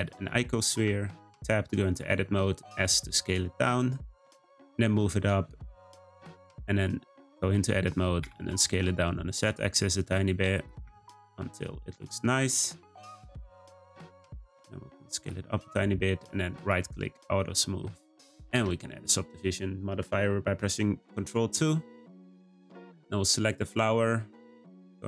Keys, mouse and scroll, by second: 0.8 Tab, 2.0 s, 3.9 Tab, 4.2 g, 6.4 Tab, 7.0 s, 8.8 s, 11.4 Tab, 11.8 g, 13.2 scroll down 1, 13.3-14.6 middle drag, 14.6 s, 15.6 middle click, 16.2 right click, 17.0-17.7 scroll up 2, 17.7-18.5 middle drag, 18.5 ctrl+2, 18.9 click, 22.4 click, 23.1-23.6 scroll down 2, 23.6 middle click, 24.1-24.7 scroll down 2, 24.7 Tab.